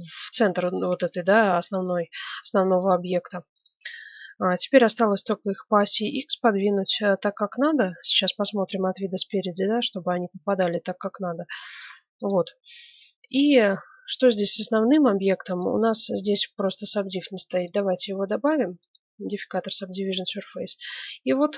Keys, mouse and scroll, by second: 2.8-5.3 right drag, 5.8 g, 8.0 KP_1, 8.8-11.6 drag, 9.0 z, 10.0 g, 12.5 middle click, 12.7 click, 13.7 middle click, 14.3 right click, 14.6 z, 15.3-17.6 middle drag, 17.6-19.3 drag, 19.7-21.5 middle drag.